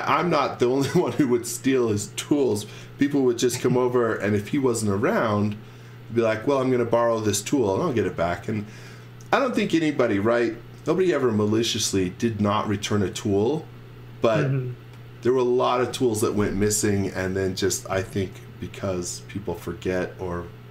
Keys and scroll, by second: 3.5 l, 6.4 space, 10.8 l, 15.2 space.